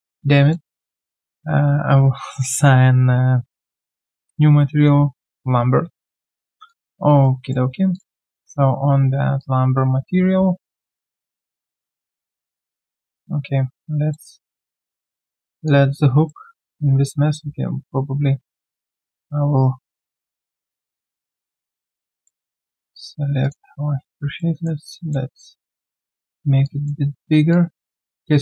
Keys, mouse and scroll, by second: 6.7 alt+click, 7.2 alt+right click, 7.6 q, 22.2 alt+middle click, 24.4 alt+middle click.